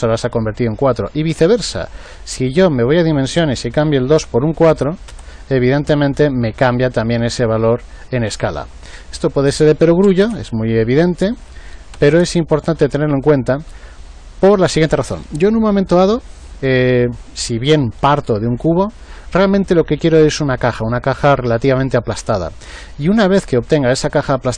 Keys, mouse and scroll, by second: 2.9 click, 9.4 click, 11.4 click.